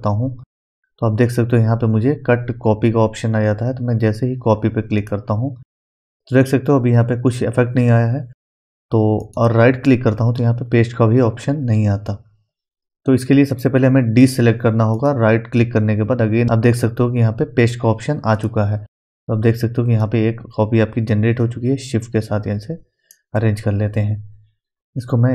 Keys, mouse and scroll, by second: 5.0 click, 9.2 right click, 9.2 right click, 13.5 click, 14.9 right click, 18.3-25.3 drag.